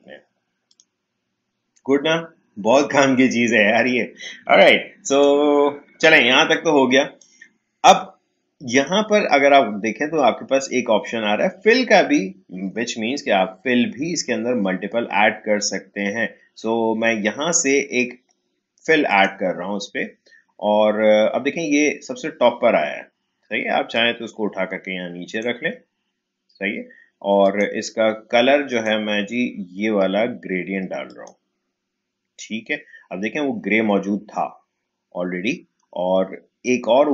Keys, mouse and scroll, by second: 5.0 click, 5.9 Delete, 6.5-9.7 drag, 19.0 click, 23.9-27.4 drag, 31.1 click.